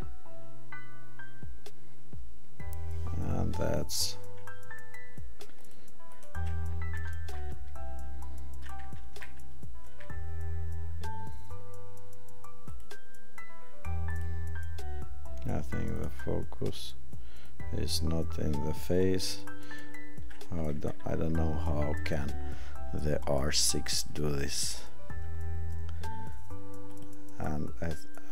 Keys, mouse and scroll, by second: 5.6 click, 6.9 right click, 15.9 click, 17.6 click, 19.4 click.